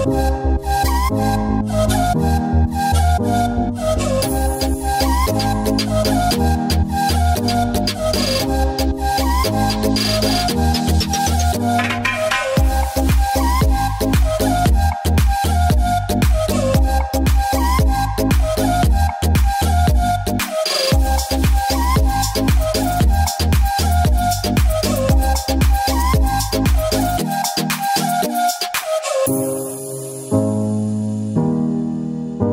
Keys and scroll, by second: 3.6 [, 7.0 space, 16.0 ctrl+s, 17.2 space, 17.5 ], 31.1 [.